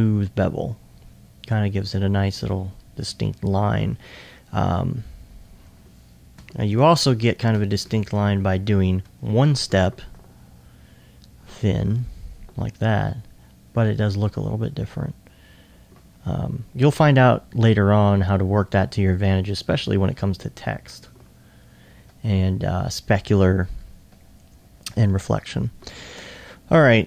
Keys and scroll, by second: 6.5 Tab, 26.3 alt+2.